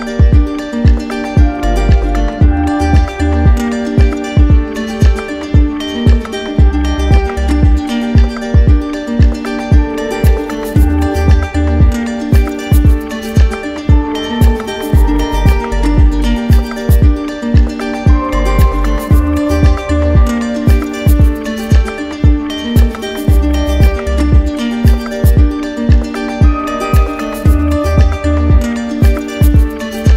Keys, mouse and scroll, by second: 1.8 right click, 3.1 click, 4.6 right click, 5.0 click, 5.5 click, 6.2 shift+right click, 9.1 click, 11.0 click, 11.9 shift+click, 12.8 ctrl+z, 13.9 click, 14.9 click, 15.9 click, 16.7 click, 18.3 click, 20.6 right click, 22.9 click, 23.3 click, 23.7 click, 24.6 right click, 25.7 click, 27.0 click, 27.8 click, 28.4 click, 29.0 click, 29.8 click.